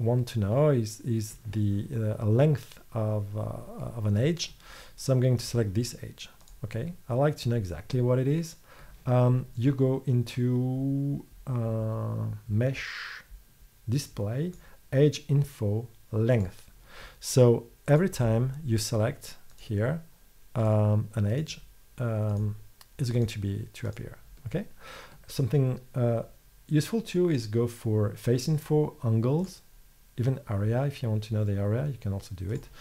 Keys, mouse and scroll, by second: 5.4-6.5 drag, 6.5 middle click, 18.0 middle click, 18.3-32.1 middle drag, 32.6-32.8 middle drag.